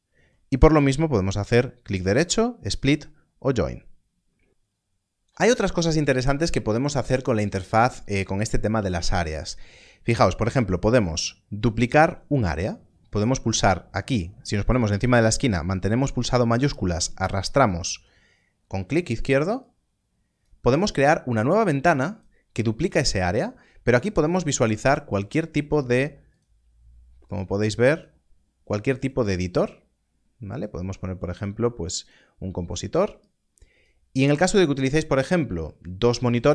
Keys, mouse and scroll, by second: 1.8 click, 15.3 middle click, 16.3 shift+click, 19.6 click, 26.2 click, 31.9 click.